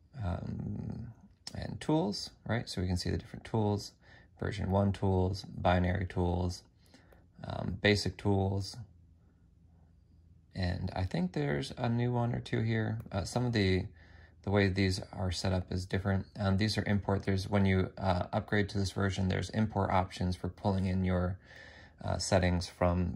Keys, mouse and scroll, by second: 0.8 F5.